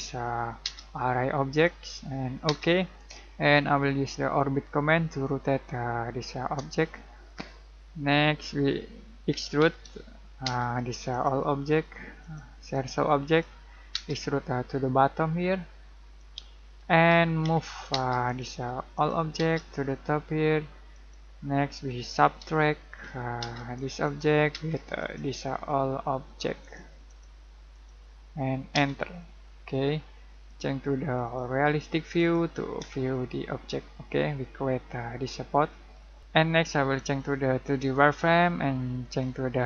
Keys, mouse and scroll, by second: 0.0-0.6 typing, 1.5 click, 2.4 space, 3.5-7.2 shift+middle drag, 7.2-7.7 scroll up 1, 7.7-9.3 middle drag, 9.0-10.4 typing, 11.1 click, 13.9 space, 16.1 click, 16.6 middle click, 17.4 m, 17.9 space, 18.2 click, 19.3 space, 19.5 click, 21.9 s, 23.0 u, 23.4 space, 23.7 click, 24.9 click, 28.7 space, 29.4-29.8 scroll down 1, 29.8-31.1 middle drag, 31.1 click, 33.1-35.9 shift+middle drag, 36.2 click.